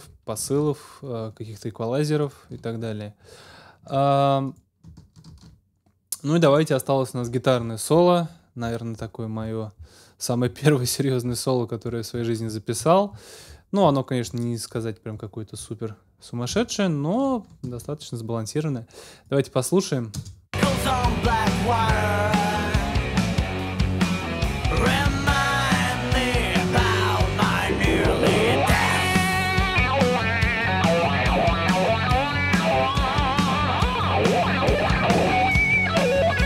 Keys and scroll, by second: 0.4 ctrl+alt+super+s, 5.3 super+s, 17.7 ctrl+alt+super+s, 18.3 alt+super+s, 20.1 space.